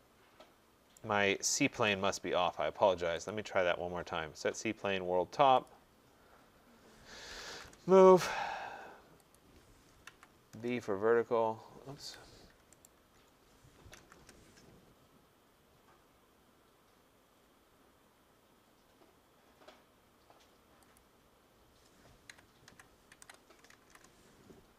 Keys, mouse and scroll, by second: 1.0 right click, 1.8 ctrl+z, 3.3 click, 5.7 click, 7.1-8.0 typing, 9.4 click, 9.8-10.6 typing, 11.9 Escape, 12.9 right click, 13.9 typing, 17.7-18.4 scroll, 21.0 click, 22.3-24.2 typing.